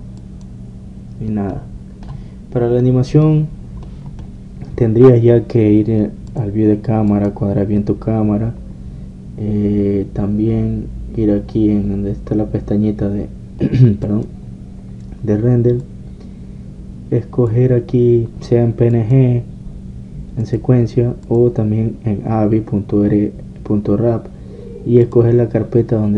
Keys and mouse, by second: 1.4-2.6 drag, 2.6 middle click, 4.0 click, 6.9 middle click, 8.4-9.8 drag, 15.2-18.9 drag, 18.9-20.1 middle drag, 20.1-24.4 drag, 24.4-26.1 middle drag.